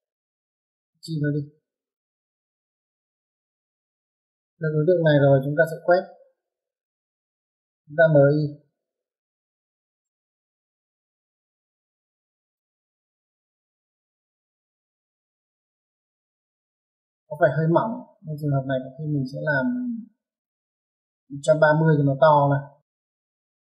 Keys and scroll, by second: 0.7 Escape, 5.2-6.4 typing, 10.1 space, 21.7 Escape, 21.9 typing, 23.3-23.7 typing.